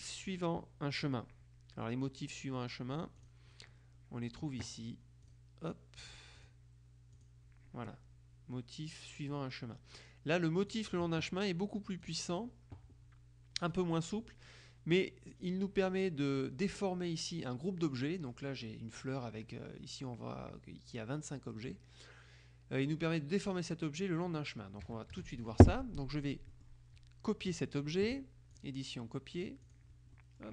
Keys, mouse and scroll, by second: 1.1 click, 3.3 click, 5.3 click, 6.5 click, 7.3 click, 10.7 click, 12.1-12.9 drag, 15.9 click, 24.9 KP_Subtract, 26.1-27.3 middle drag, 28.7 click, 29.7 click, 30.3 middle click.